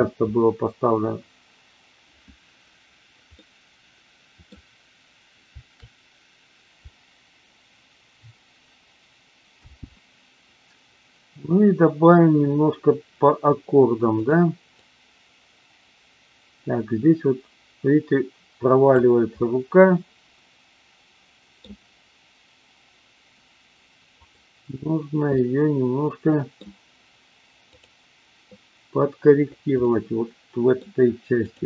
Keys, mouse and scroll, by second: 3.3-4.4 middle drag, 9.7 space, 14.1 click, 14.8-19.0 drag, 19.4-21.6 middle drag, 24.2 click, 25.4-26.5 middle drag, 27.6 click, 29.8-30.8 middle drag.